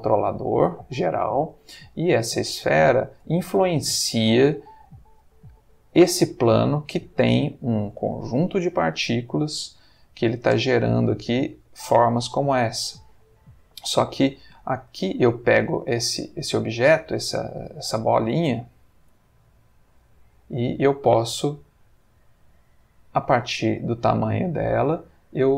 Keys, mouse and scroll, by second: 1.9 click, 2.7 ctrl+middle click, 4.5 click, 6.7-7.3 middle drag, 7.3 Escape, 10.4 space, 12.6-13.2 middle drag, 14.4 Escape, 15.6 click, 16.2 click, 17.2 g, 17.7 Escape, 19.1 click, 20.3 click, 20.8 s.